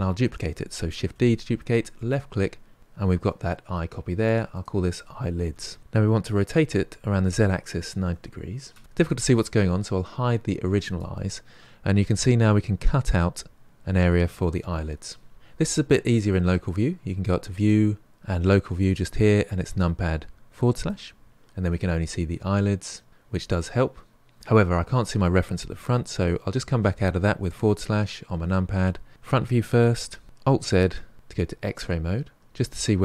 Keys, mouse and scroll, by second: 1.0 shift+d, 4.2 click, 4.5-5.8 drag, 6.5 r, 10.8 click, 17.6-19.7 drag, 21.7-23.4 middle drag, 27.5 KP_Divide, 29.1 KP_1, 30.2 alt+z, 30.5-32.4 scroll up 3.